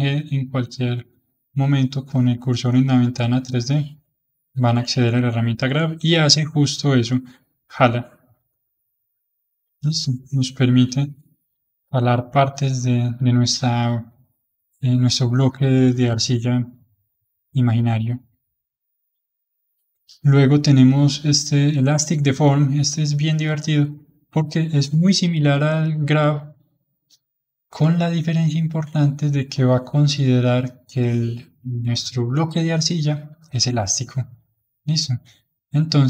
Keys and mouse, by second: 5.9 f, 6.8-9.1 drag, 9.1-11.1 middle drag, 11.1-16.6 drag, 16.6-22.4 middle drag, 22.4-25.6 drag, 28.1-31.3 middle drag, 35.4-36.0 drag.